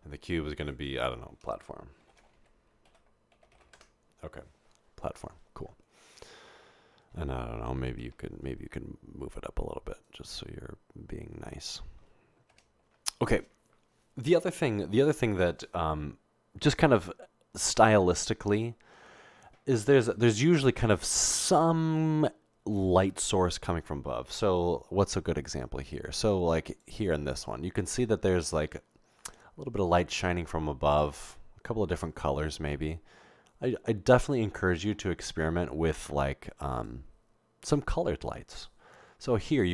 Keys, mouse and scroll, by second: 1.9-3.6 typing, 3.8 Return, 10.2 1, 12.7 0, 26.7 click, 32.2 middle click, 32.2-32.5 scroll up 2, 32.5 scroll down 1, 32.6 scroll up 2, 32.7 scroll down 1, 32.7 scroll up 2.